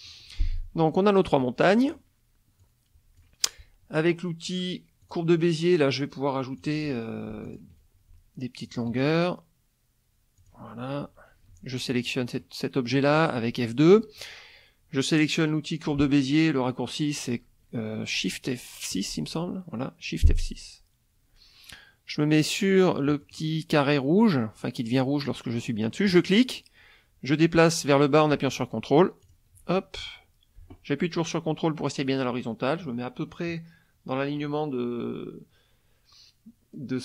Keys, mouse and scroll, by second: 0.1 middle click, 1.3 click, 2.6 click, 5.0 click, 6.6 click, 7.4 ctrl+click, 8.6 ctrl+click, 10.4 click, 11.6 F2, 11.9 click, 12.4 middle click, 19.1 shift+F6, 23.1 click, 26.1 click, 29.2 ctrl+click.